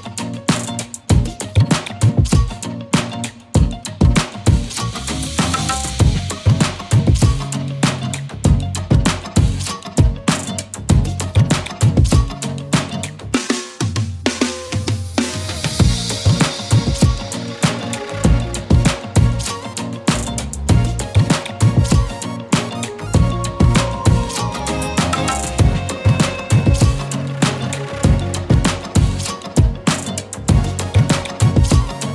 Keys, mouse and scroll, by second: 0.1 shift+click, 7.6 scroll up 1, 8.0-10.9 typing, 8.5 click, 8.8 click, 9.2 click, 10.5 click, 11.0 click, 16.7 alt+space, 17.0 click, 17.5 right click, 18.4 click, 19.9 z, 20.2 click, 20.4 z, 20.5 z, 20.5 space, 20.6 click, 27.0-28.2 typing, 27.3 click, 27.8 click, 29.0 click.